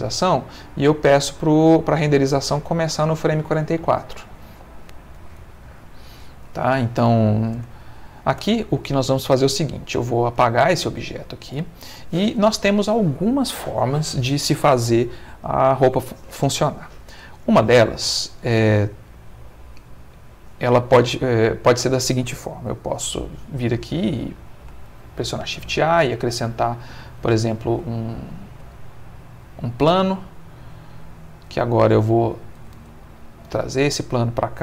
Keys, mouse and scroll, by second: 0.6 middle click, 5.4-7.4 drag, 7.6 space, 8.4 Escape, 9.9 x, 10.4 click, 10.9-12.7 middle drag, 16.9 middle click, 19.8 click, 21.5 click, 24.9 shift+a, 26.9 click, 27.9 ctrl+middle click, 28.7 ctrl+middle click, 30.6 click, 33.5 g, 34.4 click.